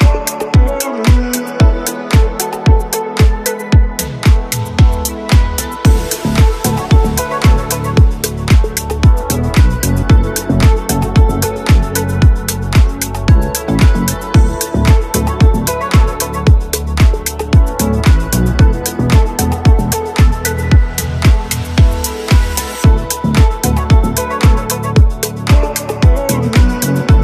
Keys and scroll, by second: 7.6 Escape, 8.0 r, 11.1 Escape, 13.4 g, 13.6 y, 21.8 y.